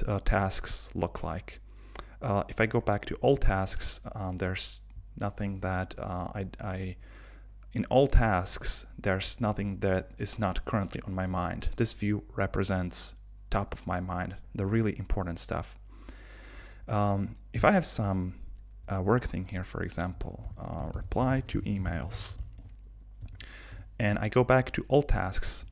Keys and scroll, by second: 20.4 super+k, 23.7 Return.